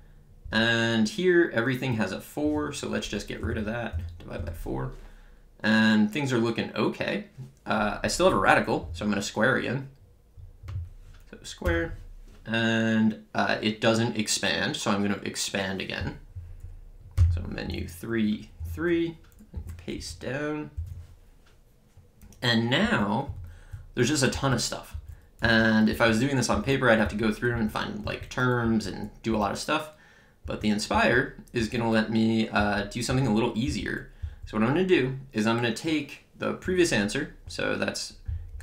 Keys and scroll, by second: 3.5 /, 3.9 4, 4.4 Return, 11.6 Return, 17.2 Menu, 17.7 3, 19.5 Up, 20.0 Return, 22.8 Up, 23.3 Right, 24.3 Down, 24.9 Up, 25.4 Down, 25.9 Up, 26.5 Left, 27.1 Down, 27.5 Up, 28.0 Right, 28.6 Down, 29.3 Up, 30.5 Down, 30.9 Left, 31.6 Up, 32.6 Down, 33.1 Up, 33.6 Left, 34.2 Down.